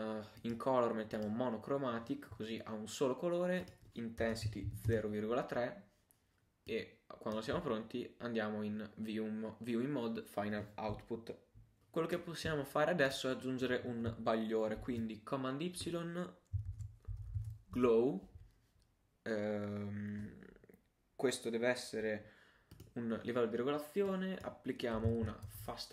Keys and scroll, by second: 14.8 super+y, 16.7 shift+g, 17.1 shift+l.